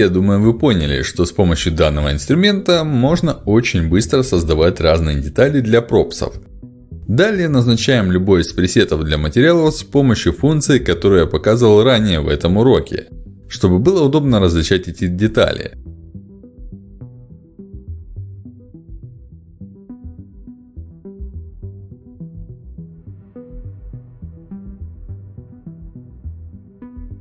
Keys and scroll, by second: 5.3 ctrl+alt+x, 8.5 ctrl+alt+x, 13.1 ctrl+alt+x, 23.0 ctrl+alt+x, 25.2 ctrl+alt+x.